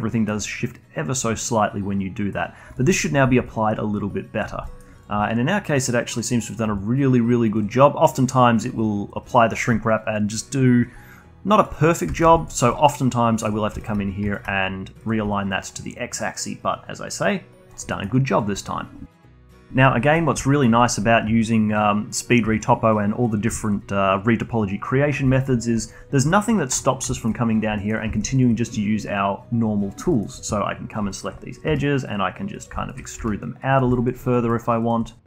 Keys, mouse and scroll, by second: 0.1 alt+middle click, 0.3-3.3 alt+drag, 3.4-4.6 alt+drag, 4.6 alt+middle click, 5.0 click, 5.2-6.6 alt+drag, 6.6 scroll down 1, 6.8-9.9 alt+drag, 11.0-12.2 alt+drag, 12.3-14.3 alt+drag, 14.3-15.3 shift+right drag, 15.3-17.9 alt+drag, 17.9 alt+middle drag, 18.1 alt+click, 20.0 middle click, 20.4 alt+click, 20.8-22.5 alt+middle drag, 22.5-24.9 alt+drag, 24.9-25.3 scroll up 1, 25.3 alt+middle click, 25.8 alt+click, 26.8 click, 27.1 alt+middle click, 27.4-27.8 scroll up 1, 27.8 alt+middle click, 28.1 shift+click, 28.3-30.1 alt+drag, 30.1-31.1 alt+middle drag, 31.1 alt+click, 31.7 e, 32.7 alt+click, 33.2 e, 33.9 alt+click, 34.5 alt+middle click, 34.8 alt+click.